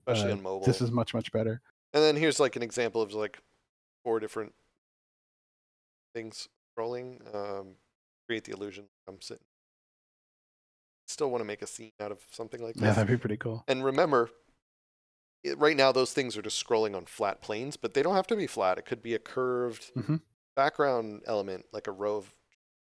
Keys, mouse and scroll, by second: 0.7 d, 1.8 s, 3.8-5.8 typing, 9.1 a, 11.5 s, 12.1 w, 12.2 d.